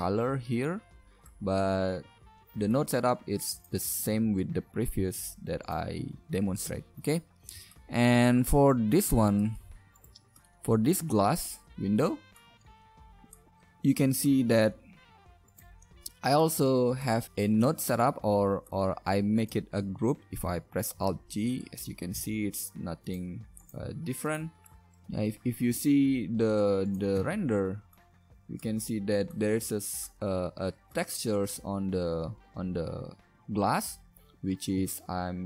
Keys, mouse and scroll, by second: 4.1 g, 6.9 middle click, 7.6 middle drag, 8.7-9.6 middle drag, 10.0-10.4 right drag, 10.8 middle click, 15.9 Tab, 18.2 Tab, 20.9 alt+g, 22.2 g, 23.8 g, 24.7 KP_0.